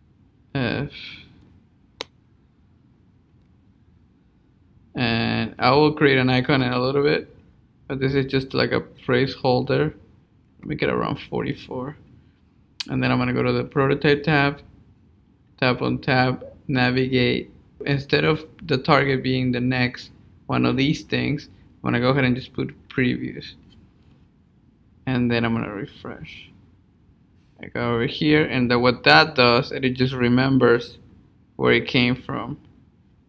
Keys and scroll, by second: 1.1 Up.